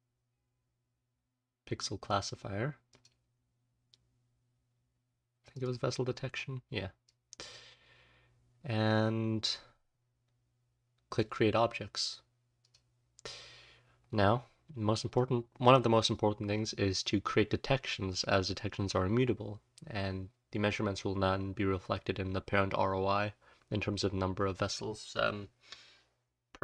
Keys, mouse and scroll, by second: 8.4-9.0 scroll up 1, 9.0-9.7 scroll up 1, 9.7-10.4 scroll down 1, 10.4-11.6 scroll down 1, 11.6-12.6 scroll down 1.